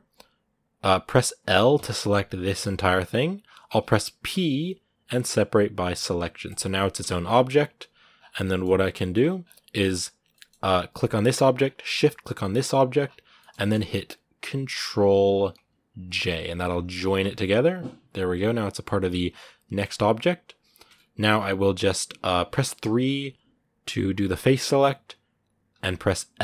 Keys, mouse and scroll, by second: 0.4-1.5 right drag, 1.5 l, 7.2 right click, 7.4 g, 7.9 scroll down 2, 8.2 middle click, 8.8 middle click, 8.9-9.3 scroll up 10, 10.1 middle click, 10.7 g, 11.4 scroll down 3, 12.6 shift+right click, 12.8 scroll down 1, 13.2-16.0 shift+middle drag, 16.0 ctrl+j, 16.4-16.8 scroll up 10, 17.0 Tab, 17.2-19.1 middle drag, 19.1-19.5 scroll down 6, 19.5 Tab, 19.5 scroll up 2, 20.7 Tab, 21.1-22.6 right drag, 22.6 3, 26.2 l.